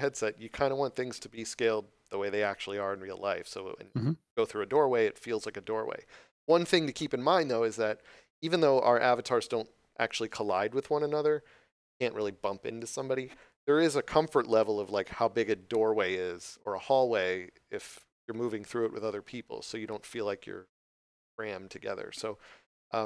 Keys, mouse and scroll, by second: 22.9 middle click.